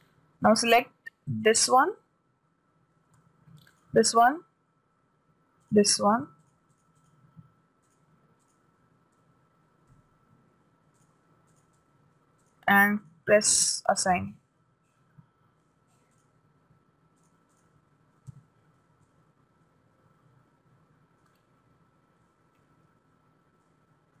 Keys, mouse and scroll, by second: 1.9 right click, 4.2 right click, 6.2-10.3 right drag, 10.3 shift+b, 10.4-13.7 right drag, 12.9-15.5 drag, 14.6 a, 16.6 right click, 17.6-20.2 drag, 18.7 a, 19.6-21.4 middle drag, 24.0-24.2 middle drag.